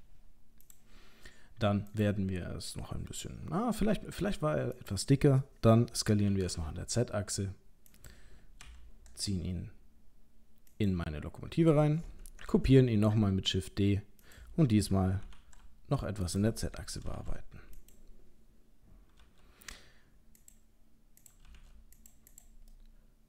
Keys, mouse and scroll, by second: 1.9 click, 3.8 s, 6.2 s, 8.6 g, 12.5 shift+d, 15.2 s, 17.1 g, 19.2 g, 21.2 click, 21.4 g, 22.3 click, 22.7 middle click.